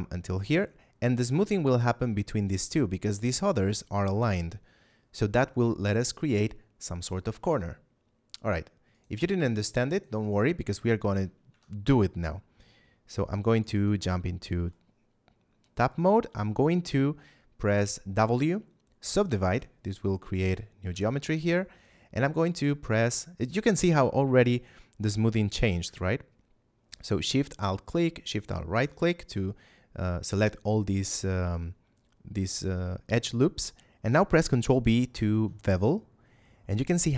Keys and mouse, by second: 8.9 click, 11.4 Tab, 13.4 right click, 13.6 Tab, 14.2 middle click, 18.0 w, 19.4 click, 20.8 ctrl+Tab, 21.3 click, 22.3 alt+right click, 27.1 alt+shift+right click, 28.2 alt+shift+right click, 35.0 ctrl+b.